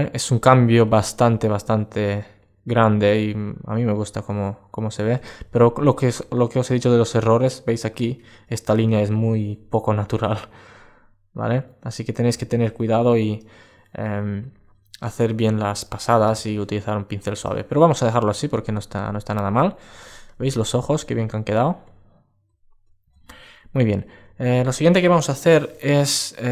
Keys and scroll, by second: 14.2 alt+space, 17.9 alt+space, 19.7 super+space, 23.2 alt+space.